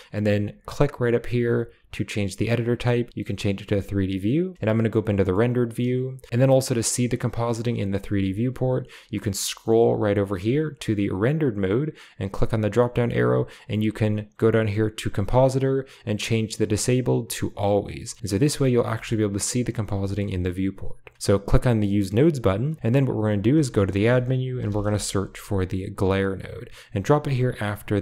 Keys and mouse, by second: 0.8-3.8 drag, 4.5 z, 5.2-5.6 middle drag, 6.4-7.4 middle drag, 12.2-13.3 drag, 14.1-18.2 drag, 19.4 middle click, 20.0 shift+middle click, 21.1 click, 21.5 click, 21.8 middle click, 23.6 shift+a, 27.3 drag, 27.8 click.